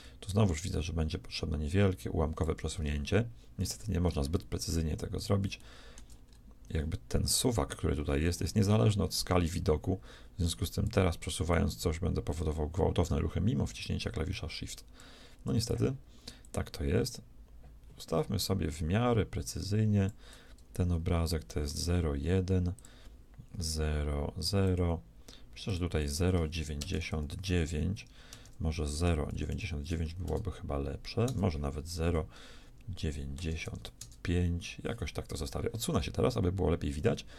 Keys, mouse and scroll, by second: 0.6-2.5 shift+drag, 4.7 middle click, 5.8-11.0 shift+middle drag, 11.5-13.6 shift+drag, 16.4-18.4 shift+drag, 22.8-27.8 drag, 29.5 9, 31.3 Return, 35.9-37.3 middle drag.